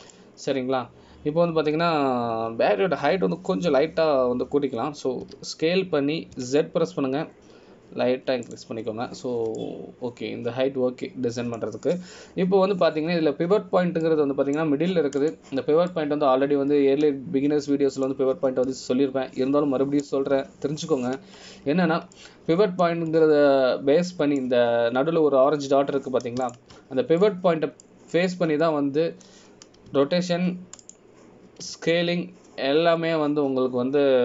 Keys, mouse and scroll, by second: 0.6 middle click, 11.7 middle click, 15.5-16.2 scroll up 1, 16.2 middle click, 17.4 click, 18.1 middle click, 23.7-24.3 scroll up 1, 24.3 middle click, 25.2 scroll down 2, 26.2 middle click, 26.2 scroll down 2, 28.6 shift+right click, 29.4 middle click, 32.1 r, 33.0 click, 33.8 r.